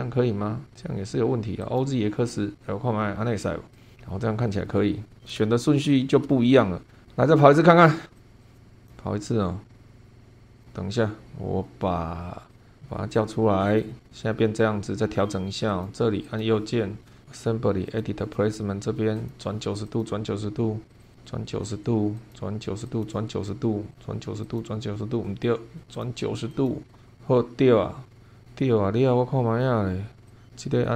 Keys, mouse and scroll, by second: 1.6 click, 3.7 click, 3.9-4.3 scroll down 1, 4.4-5.4 middle drag, 5.5 shift+middle click, 8.2 click, 8.4 click, 8.9 click, 10.0 scroll down 1, 10.6 click, 12.5 click, 13.1 click, 13.7 click, 15.7 click, 16.2 right click, 17.9 click, 19.1 click, 19.9 click, 20.9 click, 22.2 click, 22.9 click, 23.9 click, 24.4 click, 25.9 click, 26.5 click, 27.1-29.8 middle drag, 30.3 click, 30.4 scroll up 1.